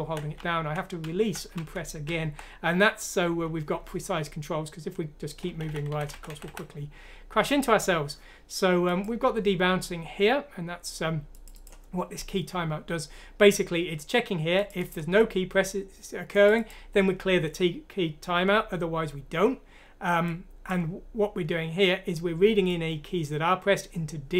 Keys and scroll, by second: 5.6-6.4 typing.